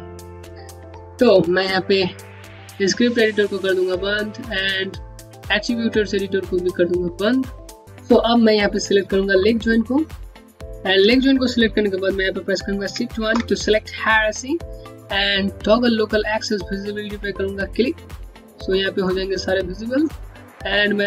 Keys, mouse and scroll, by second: 3.4 click, 6.4 click, 7.5 scroll down 1, 8.2 scroll down 1, 8.8 middle click, 12.6 shift+Num_Lock, 12.9 shift+1, 17.1 !, 17.1 click, 18.0 scroll down 1, 18.4 middle click.